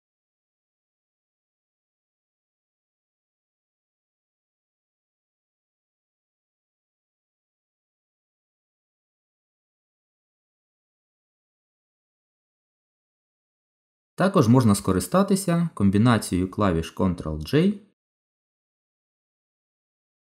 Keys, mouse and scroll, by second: 5.4 ctrl+z, 8.8 click, 10.4 click, 12.3 shift+click, 13.4 shift+click, 17.0 ctrl+j.